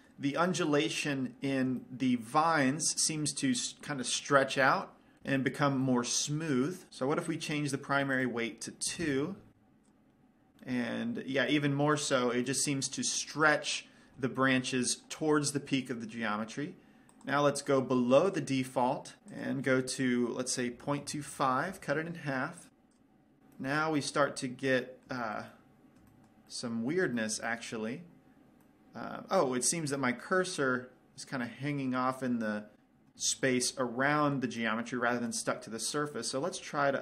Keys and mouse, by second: 8.6-10.0 drag, 10.2 click, 11.4-17.5 middle drag, 17.5-19.2 right drag, 19.7-21.6 drag, 23.2 click, 23.9-32.3 middle drag, 33.7-36.3 middle drag, 36.3-37.0 right drag.